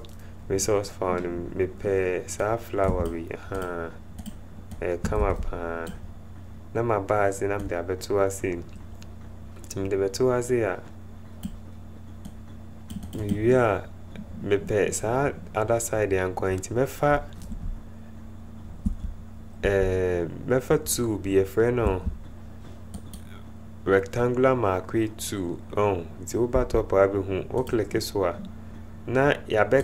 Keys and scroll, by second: 5.1 alt+Tab, 17.6 Tab, 19.2 Tab, 23.2 ', 27.2 '.